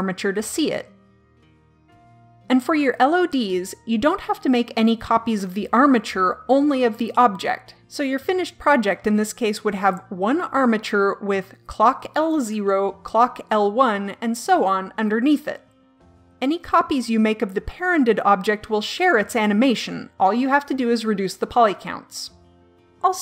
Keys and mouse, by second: 0.0-2.0 drag.